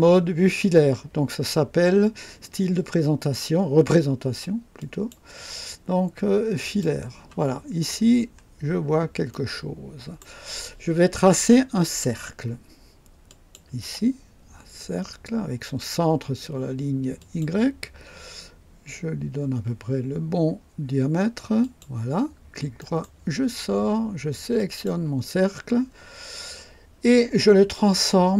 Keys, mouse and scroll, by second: 4.8 click, 6.6 click, 7.8-8.5 scroll up 2, 9.3-10.4 right drag, 13.2 click, 17.2 click, 21.6 click, 22.8 right click, 24.5 click.